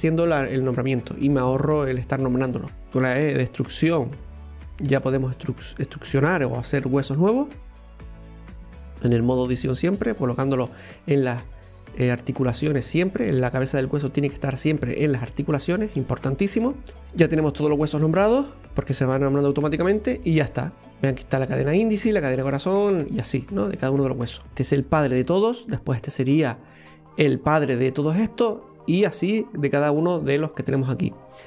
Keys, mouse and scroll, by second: 2.6 scroll down 1, 2.9 e, 4.0 e, 7.8 right click, 8.1 e, 9.6 e, 10.7 e, 14.1 right click, 14.4 e, 16.0 e, 16.9 right click, 17.1 e, 18.1 e, 24.1-24.5 scroll down 1, 24.5 shift+middle click, 25.0 right click, 26.4 right click, 29.2 right click.